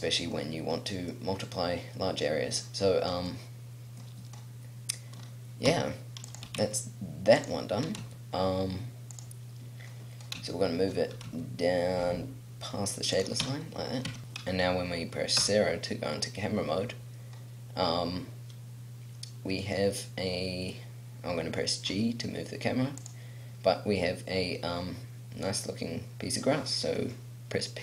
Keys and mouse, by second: 0.3 middle click, 4.3-5.6 middle drag, 5.6 s, 6.4 g, 7.8 g, 9.8 click, 11.2 g, 13.4 Tab, 13.6 click, 14.1 Tab, 14.2 KP_0, 15.3 KP_0, 19.5-21.8 right drag, 21.8 g, 23.1-25.1 drag.